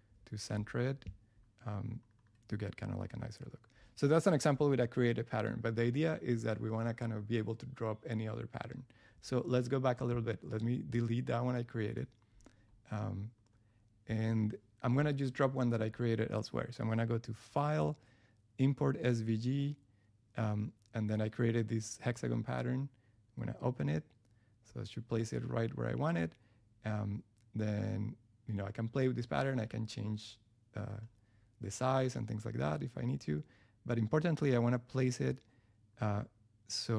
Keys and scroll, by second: 0.7 Up, 11.8 BackSpace.